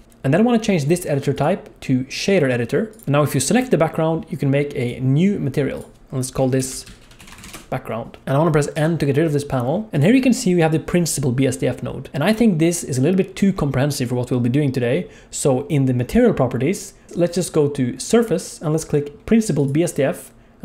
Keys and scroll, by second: 8.7 n.